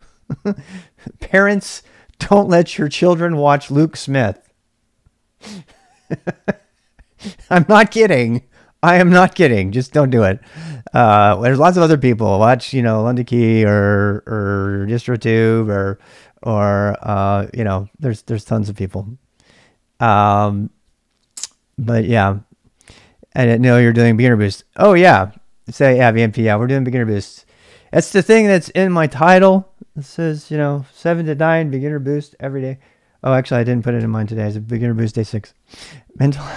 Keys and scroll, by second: 3.6 typing, 12.7 typing.